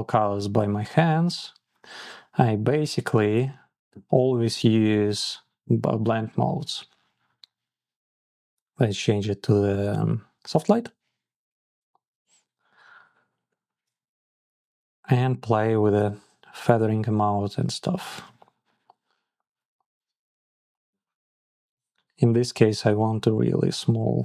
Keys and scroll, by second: 13.9 Down, 14.3 Up, 17.3 Down, 18.3 Down, 19.1 Up, 19.3 Down, 19.9 Up, 23.1 Up, 23.6 Up, 23.8 Down, 24.1 Up.